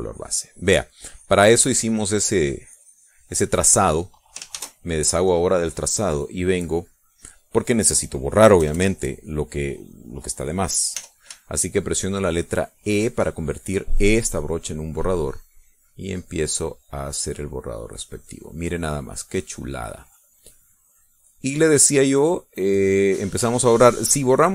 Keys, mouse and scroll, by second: 4.3 click, 5.1 ctrl+shift+a, 6.6 click, 7.3 click, 7.5 middle click, 8.0 click, 9.1 KP_Add, 9.5 click, 11.5 e, 12.0-13.9 shift+drag, 16.0-20.4 drag, 20.9-23.2 drag, 23.5 click.